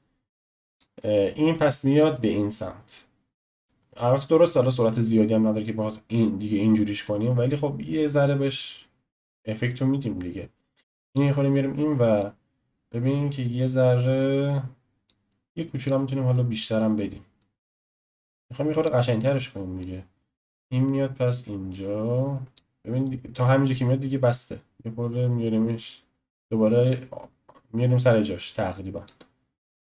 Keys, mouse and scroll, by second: 12.2-17.4 drag, 19.8-22.8 drag, 23.0-24.3 shift+middle drag, 24.3 click.